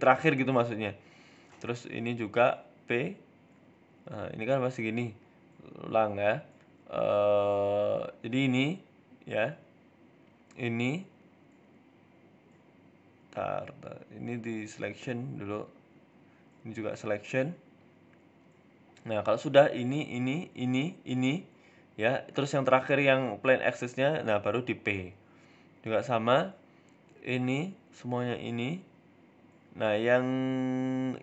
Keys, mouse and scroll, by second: 0.0 right click, 0.5 right click, 0.8 right click, 1.2 r, 3.1 ctrl+z, 3.3 ctrl+z, 3.4 ctrl+z, 3.5 ctrl+z, 6.4 ctrl+z, 7.3 ctrl+z, 7.9 ctrl+z, 8.3 KP_1, 8.6-8.9 scroll up 4, 8.9 shift+middle click, 9.5 middle click, 10.0 right click, 10.9 right click, 11.2 shift+middle click, 11.5 middle click, 12.1 Tab, 12.2 middle click, 12.7 click, 13.6 p, 14.8 Tab, 15.4 right click, 15.7 Tab, 16.1 click, 16.9 p, 17.6 Tab, 18.8 right click, 19.2 middle click, 19.5 shift+right click, 21.0 middle click, 21.6 shift+right click, 22.4 ctrl+p, 23.2 right click, 23.6 r, 25.0 scroll down 2, 25.9 KP_1, 27.4 click, 28.2 middle click, 28.6 middle click, 28.9 shift+right click, 29.7 middle click, 30.9 shift+right click.